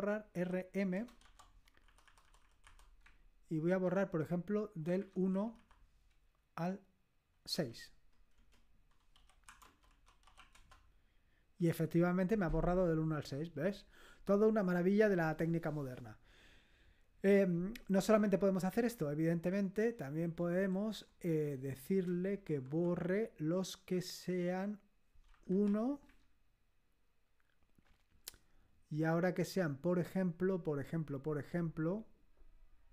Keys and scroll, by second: 0.0-1.2 typing, 1.8 Delete, 2.0 Delete, 2.2-3.5 Delete, 3.6 -, 3.8 Right, 5.0 Right, 5.3 Delete, 5.5 Delete, 7.5 6, 8.3 Return, 8.9-10.8 typing, 18.2 Up, 18.7 Up, 19.4 Left, 19.8 Left, 20.0 Left, 20.2 Left, 20.7 BackSpace, 21.0 BackSpace, 21.3 BackSpace, 22.7 BackSpace, 25.4 Left, 25.6 1, 26.0 Right.